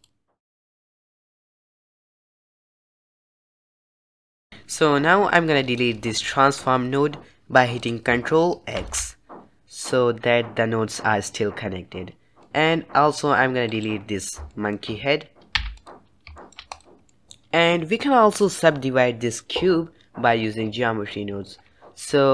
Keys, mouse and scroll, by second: 0.7 click, 1.6-4.5 drag, 9.0 ctrl+x, 12.6-14.0 middle drag, 14.0 click, 14.7-16.1 shift+middle drag, 16.1 x, 16.6-17.0 shift+middle drag, 17.0 click, 17.3-22.3 shift+middle drag.